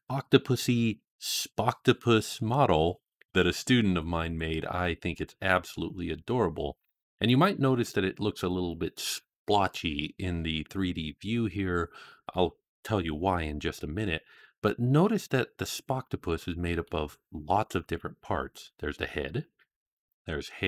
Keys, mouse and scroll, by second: 5.0-5.6 middle drag, 6.6-7.2 scroll up 1, 7.2-7.8 scroll down 1, 7.8-8.2 middle drag, 15.0 click, 16.1-16.7 middle drag, 19.8 click.